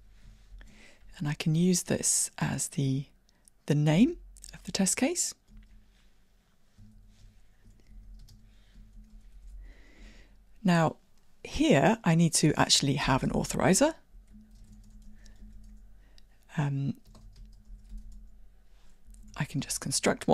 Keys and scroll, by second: 4.0 super+c, 5.6 super+v, 19.3 Tab.